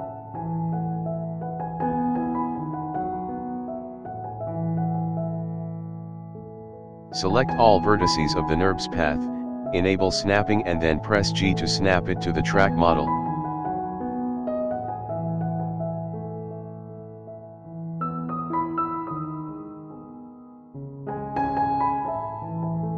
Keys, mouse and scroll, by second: 0.2 g, 1.6 click, 2.1 g, 5.1 click, 8.5 click, 9.5-9.8 scroll down 1, 10.2-10.7 scroll down 4, 10.7-12.0 scroll up 5, 12.0 KP_7, 13.9-14.3 scroll up 2, 14.6-15.4 shift+middle drag, 16.2 a, 17.4 g, 22.8 shift+middle click, 22.8-22.9 scroll up 1.